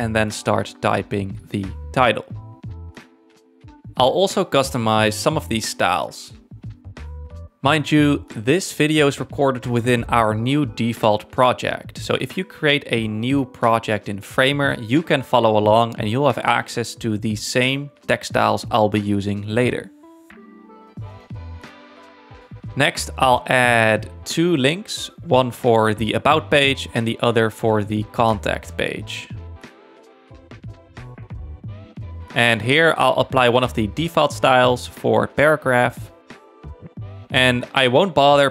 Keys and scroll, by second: 0.0-1.6 typing, 7.2 m, 8.0 Return, 15.2 alt+Down, 16.7 alt+Up, 17.3 alt+Left, 20.7 space, 23.9 t, 26.3-27.6 typing, 28.3 super+d, 29.8-30.8 typing.